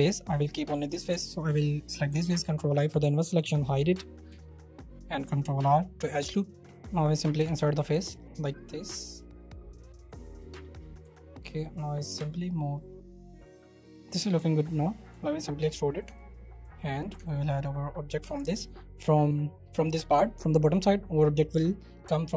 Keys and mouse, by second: 0.6 middle click, 2.4 ctrl+i, 3.4 h, 4.3 ctrl+r, 6.7-10.2 middle drag, 12.1 2, 14.0 Tab, 14.2 middle click, 14.2 b, 14.3 3, 14.5 middle click, 15.1 e, 15.9 middle click, 16.0 Tab, 16.4 right click, 17.0 right click, 17.1 Tab, 17.8 right click, 18.2 Tab, 18.6 right click.